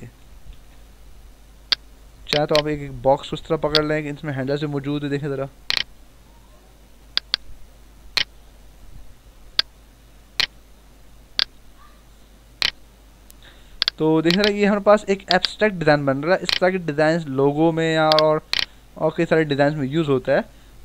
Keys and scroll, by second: 0.4 ctrl+z, 19.9 Return.